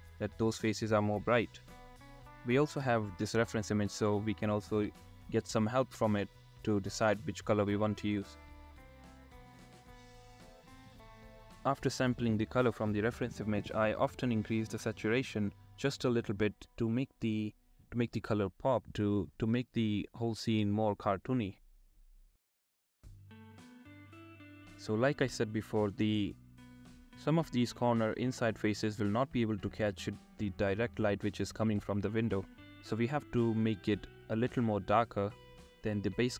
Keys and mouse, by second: 0.5 click, 2.1 click, 2.4 drag, 4.3 click, 4.6 click, 5.0 click, 6.4 click, 7.2 click, 7.8 click, 8.2 click, 8.7 click, 9.5 middle click, 10.1 shift+middle click, 10.8 shift+middle click, 13.3 middle click, 14.8 shift+middle click, 15.1 middle click, 15.2 shift+middle click, 15.5 shift+middle click, 16.6 click, 18.0 click, 18.3 shift+middle click, 18.5 click, 19.7 ctrl+z, 20.3 click, 20.5 shift+middle click, 21.0 click, 21.5 middle click, 21.7 middle click, 25.0 shift+click, 26.4 ctrl+z, 27.0 shift+click, 30.5 click, 32.6 ctrl+z, 35.8 shift+middle click, 36.2 shift+middle click.